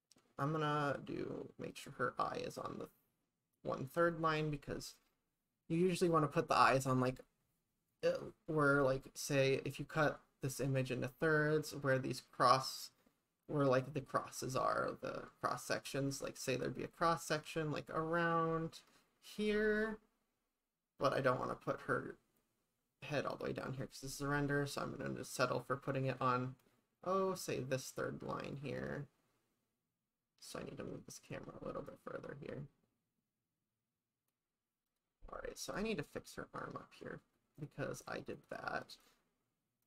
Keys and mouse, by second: 31.9-34.3 drag, 34.9 click, 35.7 click, 36.2 click, 37.6 click, 38.0 click, 38.4 click, 38.9 click.